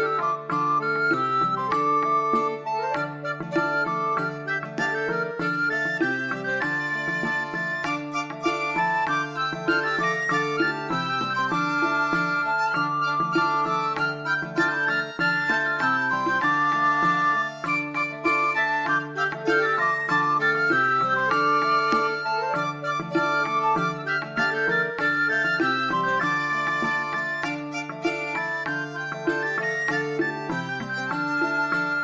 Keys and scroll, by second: 11.4-12.7 typing.